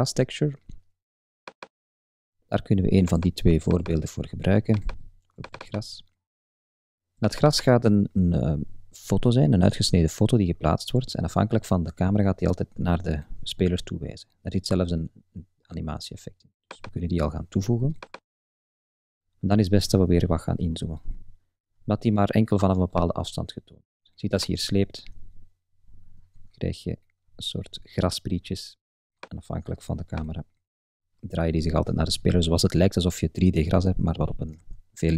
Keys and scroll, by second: 34.6 super+z.